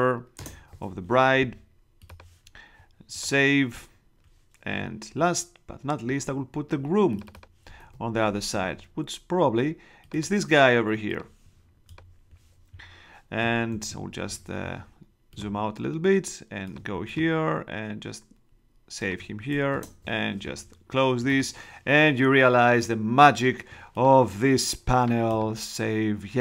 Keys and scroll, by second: 0.3 Return, 7.8 super+Tab, 13.7 super+-, 19.7 shift+Return.